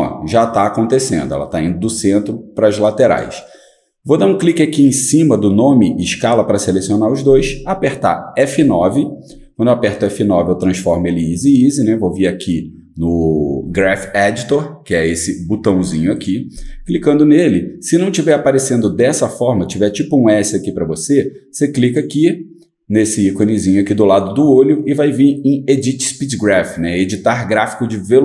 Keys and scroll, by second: 3.2-4.0 typing, 8.4 F9.